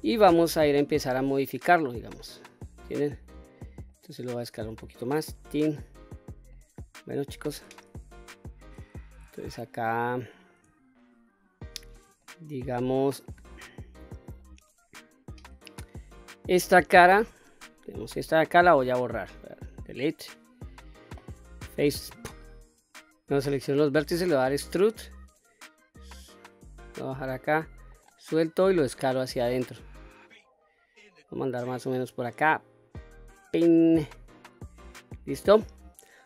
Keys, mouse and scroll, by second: 1.8 middle click, 2.5-3.1 scroll up 2, 3.1-4.2 middle drag, 4.2 s, 5.2 click, 5.7-6.4 scroll up 2, 6.1 middle click, 7.9 shift+middle click, 8.6-8.9 scroll up 2, 9.0 shift+middle click, 9.6 middle click, 10.6 shift+middle click, 11.8-12.5 middle drag, 13.1 middle click, 14.0 middle click, 15.7 click, 16.8 3, 17.3 click, 19.1 Delete, 22.7 alt+shift+click, 22.7 middle click, 24.2 e, 27.5 right click, 28.4 s, 33.0 click, 33.9-34.5 middle drag, 35.2-35.8 shift+middle drag.